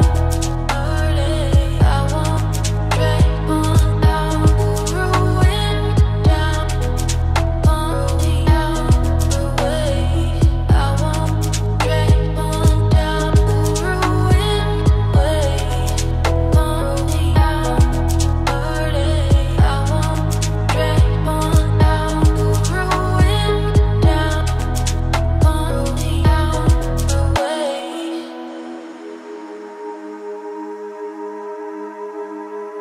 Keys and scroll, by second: 14.8 ctrl+shift+i, 18.7 ctrl+shift+[, 22.7 ctrl+space, 31.5 ctrl+space.